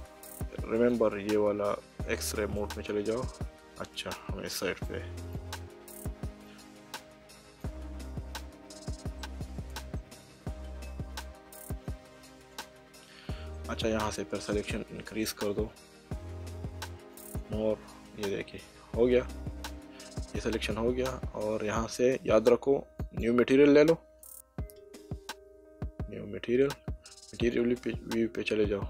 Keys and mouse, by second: 0.7 click, 2.6 click, 3.5 middle click, 4.8 click, 6.0 click, 9.2 middle click, 11.7 click, 14.5 click, 17.1 click, 18.2 middle click, 23.0 click, 27.4 click.